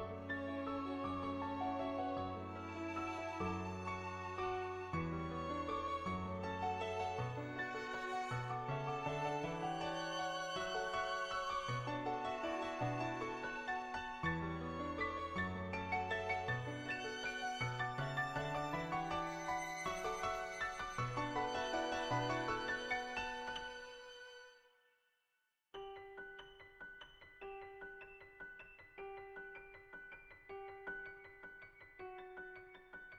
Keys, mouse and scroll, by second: 7.0 shift+middle click, 7.4 middle click, 8.5 shift+middle click, 10.1 middle click, 13.5 middle click, 17.3 g, 17.5 x, 18.2 click, 19.1 click, 23.3 middle click, 24.2-25.7 middle drag, 25.8 middle click.